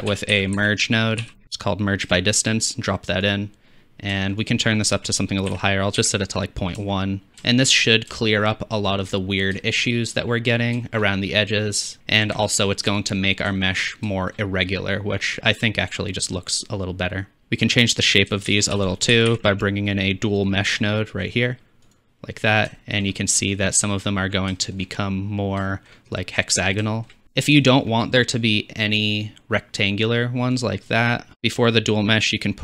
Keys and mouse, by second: 3.3-4.4 drag, 7.3 shift+z, 17.4 shift+z, 18.5 shift+a, 22.0 click, 27.2 shift+z, 30.7-32.6 drag, 31.3 shift+a, 31.3 BackSpace.